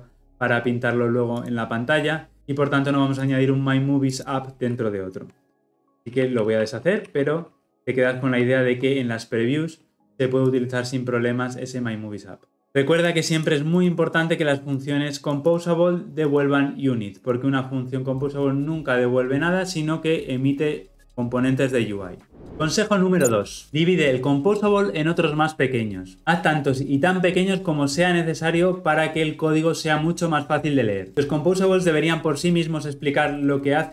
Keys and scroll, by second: 5.8 ctrl+z, 7.1 ctrl+z, 7.6 ctrl+z.